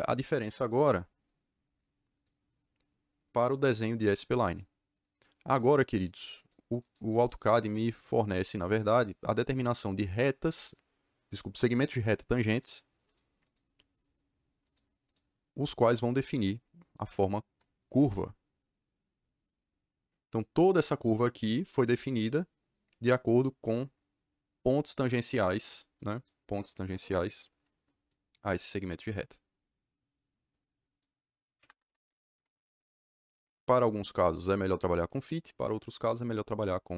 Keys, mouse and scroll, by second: 0.6 click, 1.1 click, 1.6 click, 2.1 click, 3.6 click, 3.9 click, 4.4 click, 4.9 click, 5.9 click, 6.3 click, 6.7 click, 7.1 click, 7.5 click, 8.0 click, 8.4 click, 12.4 click, 13.0 click, 13.4 click, 14.6 click, 15.0 click, 15.6 click, 16.8 click, 17.9 KP_Enter, 21.9 click, 31.5 Escape, 31.7 Escape.